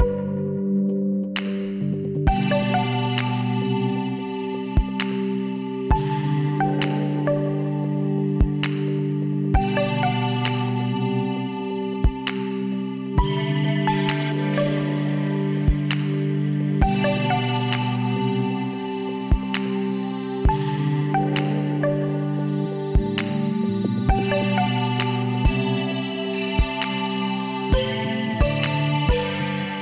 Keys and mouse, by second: 1.2 e, 2.7-4.5 drag, 4.5 s, 6.2-8.1 drag, 7.8 z, 8.5-10.3 drag, 10.9-12.7 middle drag, 11.8 e, 13.7-15.5 drag, 16.7 s, 19.0 a, 19.3 a, 19.9 w, 22.4 z, 23.3 ctrl+r, 26.6-29.4 drag, 27.0 z, 28.1 b, 29.7 z.